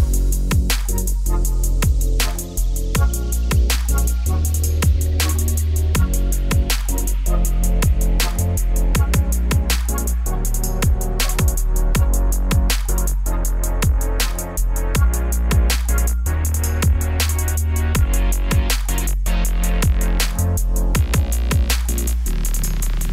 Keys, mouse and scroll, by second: 11.0 middle click, 11.4 scroll down 3, 17.6 middle click, 17.9-18.3 scroll down 1, 18.3 middle click, 19.2 3, 19.2-22.8 drag, 22.9 shift+click.